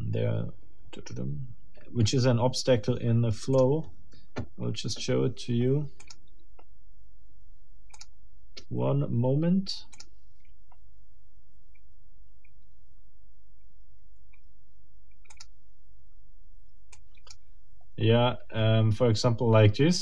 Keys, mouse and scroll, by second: 3.5 click, 6.0 click, 8.0 click, 9.9 click, 15.3 click, 16.9 click.